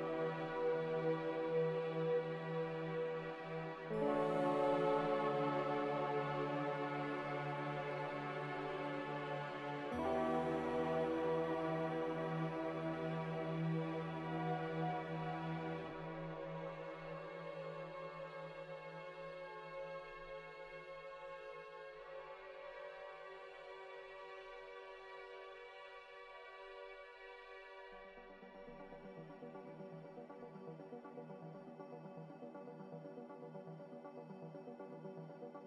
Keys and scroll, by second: 5.3 ctrl+c, 5.5 ctrl+v, 6.6-7.7 typing, 10.2-10.9 typing, 22.6 ctrl+c, 22.8 ctrl+v, 24.5-25.3 typing, 25.4 Return, 26.9 z, 29.0 a.